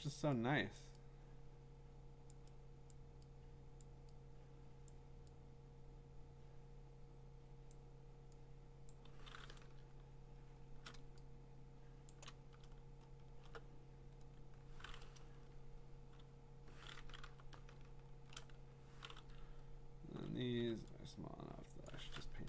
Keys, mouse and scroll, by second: 0.1 click, 2.3 click, 2.9 click, 3.9 click, 4.9 click, 7.7 click, 8.9 click, 9.9-10.8 scroll, 10.8 middle click, 12.1 click, 12.7 middle click, 12.7 middle click, 12.8-13.4 scroll, 17.2 b, 17.8-19.3 scroll, 19.3-20.2 [, 20.0 middle click, 20.4 [, 20.4 [, 20.7 [, 21.9 click.